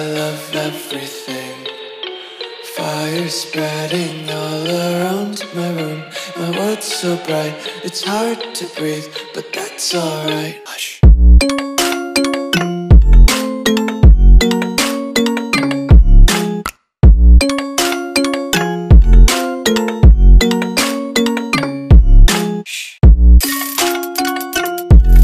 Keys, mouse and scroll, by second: 1.6-2.3 scroll down 1, 2.3 click, 4.7 s, 11.0 s, 11.0 click, 17.8 click, 19.4 Delete, 20.5 click, 21.7 ctrl+s.